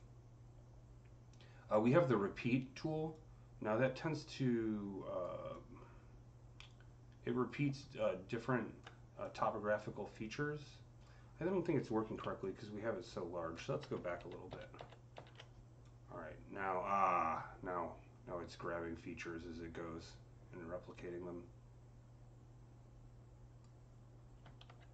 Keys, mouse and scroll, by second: 3.0-5.4 ctrl+drag, 5.4-13.0 drag, 12.0-13.5 typing, 13.0-24.9 drag, 16.0 typing, 24.5 ctrl+z, 24.5 typing.